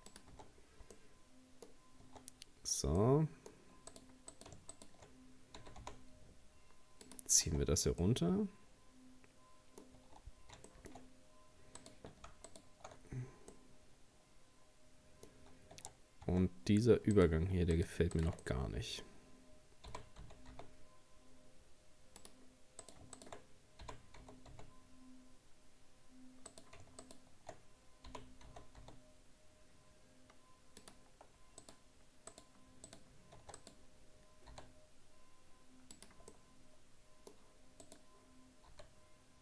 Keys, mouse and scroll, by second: 0.3 Tab, 0.5-1.0 scroll down 2, 1.0 middle click, 1.8 scroll up 1, 2.1 Tab, 2.6-3.0 scroll up 3, 3.0 middle click, 3.9 right click, 4.3 right click, 4.7 shift+right click, 5.6 g, 7.5 scroll down 2, 8.0-10.0 middle drag, 10.0 Tab, 10.7 shift+middle click, 11.0-11.8 scroll up 1, 11.8 right click, 12.5 alt+shift+right click, 13.1-13.5 scroll down 4, 13.5-15.4 middle drag, 15.4-15.8 scroll up 1, 15.8 Tab, 16.1 scroll up 1, 16.3 Tab, 17.1 right click, 17.8 shift+right click, 18.2 shift+right click, 18.4-19.9 middle drag, 19.9 g, 22.8 right click, 23.2 shift+right click, 23.8 g, 27.0 shift+right click, 28.1 g, 31.6 right click, 32.3 right click, 32.9 right click, 33.4 Tab, 33.6 right click, 34.5 s, 36.3-37.8 middle drag, 37.8 right click, 38.7 s.